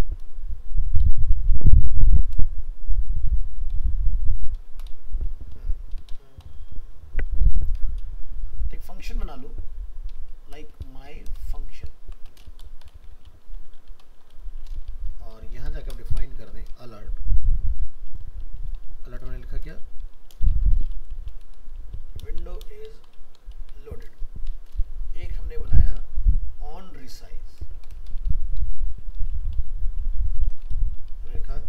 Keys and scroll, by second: 11.4 shift+Left, 11.9 shift+Right.